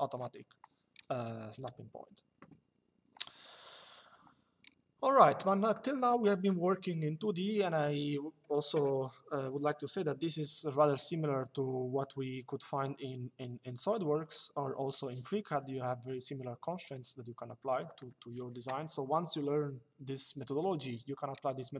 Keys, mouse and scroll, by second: 1.3 Delete.